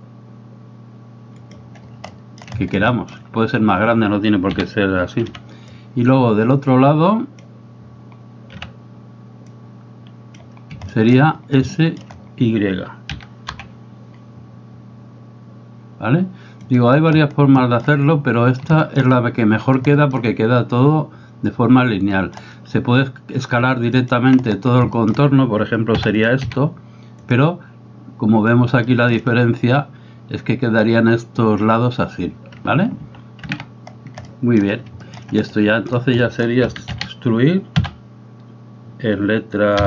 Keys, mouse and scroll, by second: 2.1 shift+middle click, 3.0 shift+middle click, 4.6 a, 5.2 b, 8.6 b, 10.9 shift+middle click, 11.8 shift+middle click, 13.2 s, 17.6 shift+middle click, 18.9 shift+middle click, 20.1 shift+middle click, 22.3 shift+middle click, 24.1 alt+right click, 25.0 shift+middle click, 26.1 e, 28.9 shift+middle click, 33.0 ctrl+z, 33.5 ctrl+z, 34.3 shift+middle click, 35.1 middle click, 35.5 middle click, 36.2 middle click, 36.6 a, 37.0 a, 37.9 e.